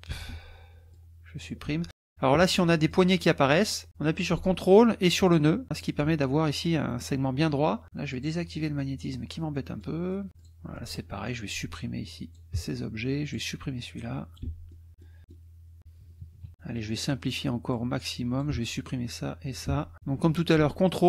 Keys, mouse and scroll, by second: 0.3 Delete, 0.9 click, 1.6 Delete, 2.9-3.9 drag, 5.2 ctrl+click, 5.7 ctrl+click, 8.1 click, 8.8 click, 9.5 middle click, 10.1 click, 10.4 click, 10.7 click, 11.5-12.5 drag, 12.5 Delete, 13.3 click, 13.8 click, 14.4 Delete, 14.7 click, 15.3 middle click, 16.2 KP_Subtract, 16.5 middle click, 17.7 click, 18.5 Delete, 18.8 click, 19.6 Delete.